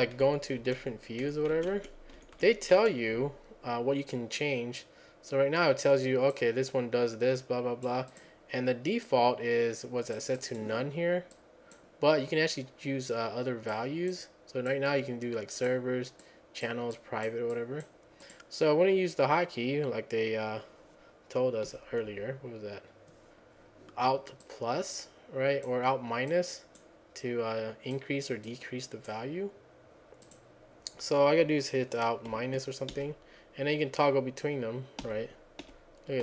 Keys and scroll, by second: 0.2 Up, 0.6 Down, 1.2 Up, 1.5 Down, 1.7 Down, 2.2 Up, 2.3 Up, 2.7 Down, 22.1 F10, 33.0 alt+-, 35.0 alt+-, 35.7 alt+-.